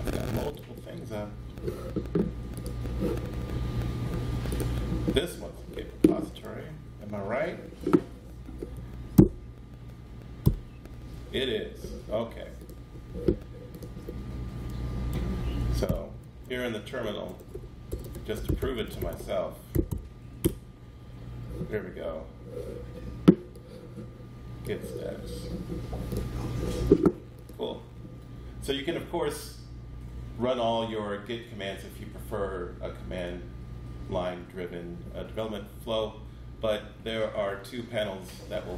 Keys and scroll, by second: 9.1 super+0, 10.4 super+9, 15.8 alt+F12, 16.6-18.0 typing, 19.5-20.2 typing, 20.4 Return, 37.3 super+9.